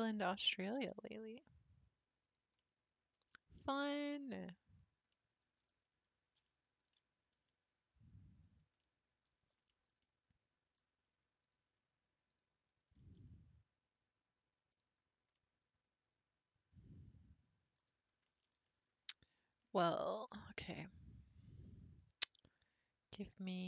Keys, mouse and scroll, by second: 0.8 g, 2.6 middle click, 3.2-3.6 scroll down 3, 3.6-4.8 shift+middle drag, 4.8-5.1 scroll up 5, 5.1 middle click, 5.8-6.8 scroll down 3, 6.8 alt+click, 7.3 s, 8.8-9.3 middle drag, 9.3 scroll down 3, 9.7-11.4 shift+middle drag, 11.4 click, 12.3 click, 12.7-13.0 scroll up 3, 13.0 g, 15.0 scroll down 4, 15.3-18.9 middle drag, 18.9-19.6 scroll up 4, 19.6-23.4 shift+middle drag.